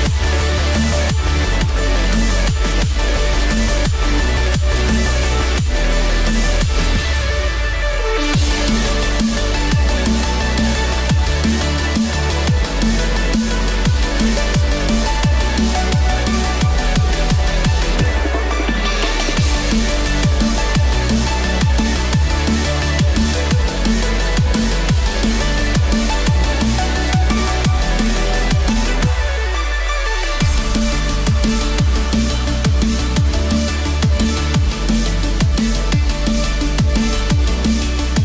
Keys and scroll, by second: 2.6 ctrl+=, 11.4 ctrl+=, 13.8 ctrl+z, 19.3 ctrl+-, 19.6 ctrl+0, 21.1 ctrl+=.